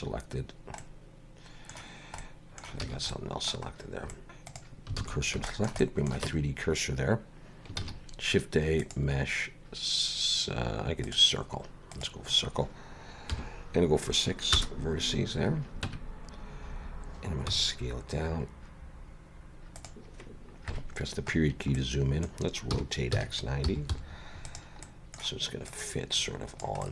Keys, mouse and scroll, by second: 0.0 scroll down 2, 0.8 middle click, 2.3 middle click, 2.9 alt+a, 3.1 middle click, 4.6 alt+shift+click, 4.6 shift+s, 5.0 alt+a, 5.2 scroll down 3, 5.5 shift+middle click, 5.8 middle click, 6.3 Tab, 7.8 shift+a, 11.9 click, 15.4 scroll down 3, 15.9 Tab, 17.6 s, 20.7 KP_Decimal, 21.4 scroll down 4, 21.8 middle click, 22.8 r, 24.9 middle click, 25.7 click, 26.8 middle click.